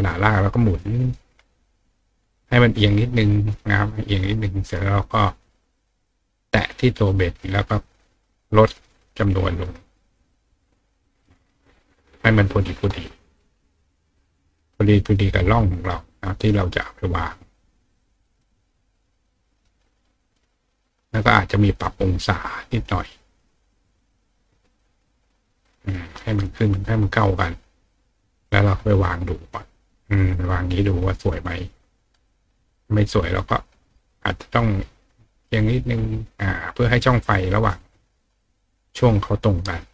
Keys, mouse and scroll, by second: 0.5 click, 1.9-2.9 drag, 3.7 click, 6.6 click, 8.9 click, 9.2 click, 9.4 click, 9.6 click, 9.8 click, 10.1 click, 11.3 click, 13.3 click, 14.1 click, 15.0 click, 15.6 click, 17.8 click, 19.0 click, 20.3 click, 21.7 click, 22.7 click, 23.3 click, 23.9 click, 25.6 click, 26.4 click, 27.6-29.5 drag, 32.4 click, 34.6-35.9 drag, 36.5 click, 37.8-39.8 drag.